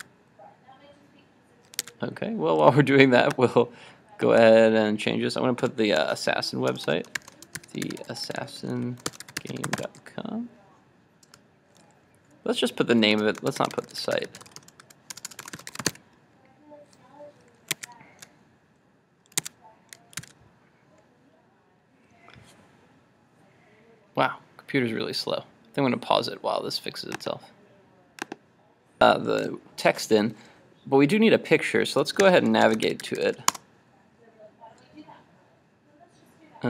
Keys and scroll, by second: 0.1 super+r, 2.0 super+Tab, 17.8 super+Tab, 19.4 super+Tab, 20.3 super+s, 32.2 super+t.